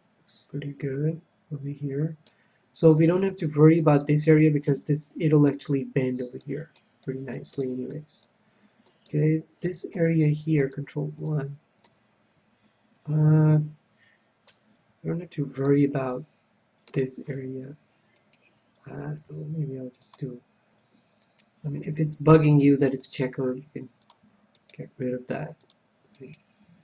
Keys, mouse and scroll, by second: 3.4 KP_3, 3.8-6.2 middle drag, 6.9-11.2 middle drag, 11.5-13.4 middle drag, 16.1-17.7 middle drag, 18.7-20.4 right drag, 19.6 g, 20.6-22.2 drag, 21.7-25.1 right drag, 22.2 g, 22.9-25.1 drag, 24.0 g, 25.5 g.